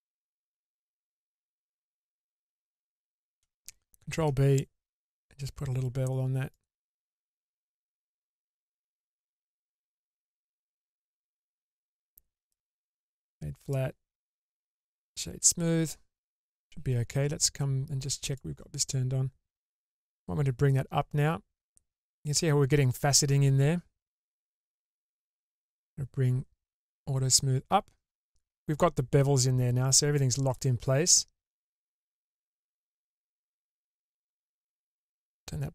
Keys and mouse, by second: 4.3 ctrl+b, 7.8 Tab, 8.8-9.4 middle drag, 10.8-11.8 right drag, 12.6-13.4 right drag, 18.4 click, 20.4-22.4 drag, 24.6-30.8 drag, 31.6-33.5 middle drag, 35.1 click.